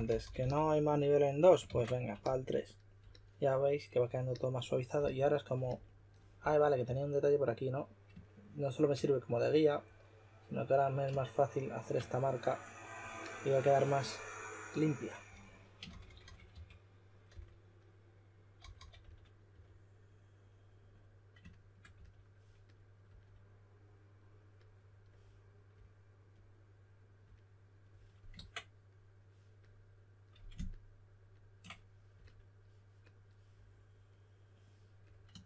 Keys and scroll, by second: 0.0-0.8 typing, 1.6 super+d, 4.9 s, 6.1-7.3 typing, 15.2-17.2 typing, 18.3-19.9 typing, 21.9 s, 28.3 super+z.